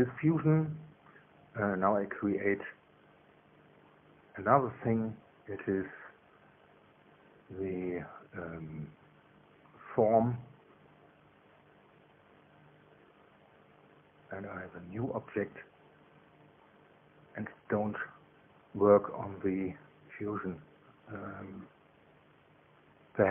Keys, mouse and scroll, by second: 2.1 click, 10.5 click, 13.8 click, 15.2 click, 16.1 click, 17.0 click, 20.5 click.